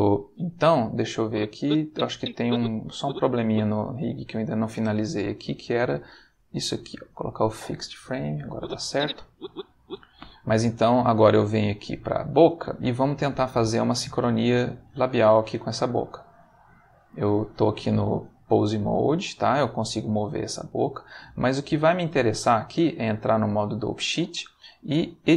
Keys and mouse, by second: 1.2-3.3 drag, 3.6 click, 5.7 click, 6.4 click, 7.1 click, 8.5-10.0 drag, 12.0 click, 13.1 click, 13.8 click, 14.6 click, 16.1 ctrl+Tab, 16.5 ctrl+click, 17.5 click, 18.8 g, 20.0 Escape, 21.8 click, 22.4 click.